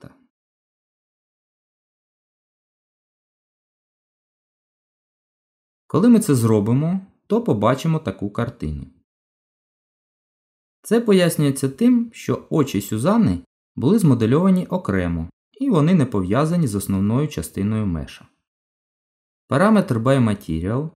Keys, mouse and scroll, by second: 1.3 Tab, 3.1 click, 4.2 click, 6.3 shift+click, 6.4 shift+click, 8.4 g, 11.9 middle click.